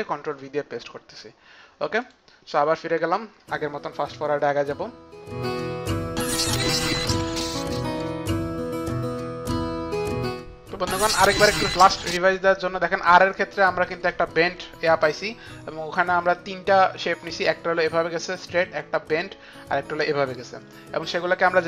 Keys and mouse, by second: 0.6 click, 5.4 click, 5.5 click, 5.6 ctrl+alt+c, 5.6 ctrl+v, 5.8 ctrl+alt+c, 5.8 click, 5.8 ctrl+v, 6.0 click, 6.1 Page_Down, 6.1 Home, 6.2 ctrl+Up, 6.2 click, 6.2-8.5 typing, 6.4 shift+click, 6.4 ctrl+shift+c, 6.6 click, 6.7 shift+click, 6.8 Right, 6.8 Return, 6.9 click, 7.0 click, 7.0 Up, 7.1 Right, 7.3 click, 7.4 Up, 7.4 click, 7.5 Down, 7.7 click, 8.2 click, 8.4 shift+click, 8.4 shift+click, 8.5 click, 8.7 shift+Page_Down, 8.8 click, 8.8 click, 9.0 click, 9.2 shift+Page_Down, 9.2 click, 9.4 click, 9.6 click, 9.7 click, 9.8 shift+Page_Down, 10.0 ctrl+Up, 10.1 click, 10.4 click, 21.2 click.